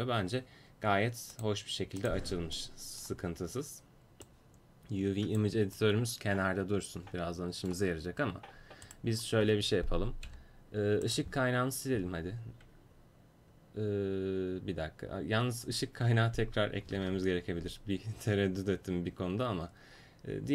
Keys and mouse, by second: 1.8-6.1 drag, 6.1-8.9 middle drag, 8.9-10.3 right drag, 10.3 Delete, 16.9 shift+a.